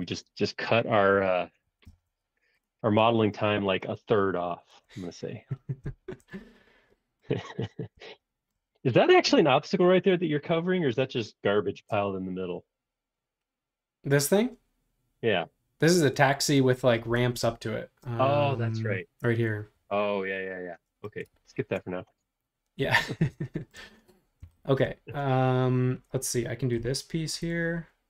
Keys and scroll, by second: 1.2 b, 1.6 Escape, 1.9 space, 2.1 Escape, 17.2 super+Tab, 21.7 super+Tab.